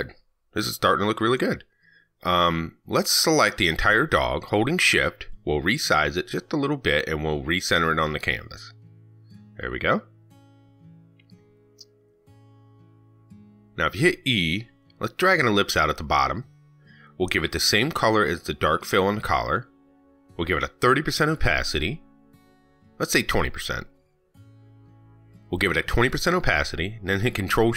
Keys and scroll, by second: 26.6 ctrl+shift+Down.